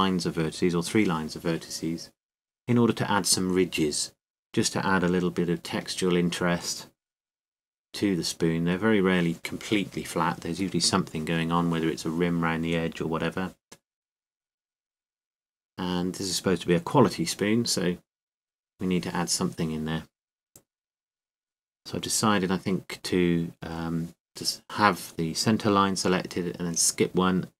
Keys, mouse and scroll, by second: 2.1-5.2 scroll up 1, 5.2-7.9 scroll up 1, 7.9-8.6 scroll up 1, 8.6-9.9 scroll up 1, 9.9 scroll up 1, 10.2-14.2 right drag, 13.5 middle click, 26.2-27.5 right drag.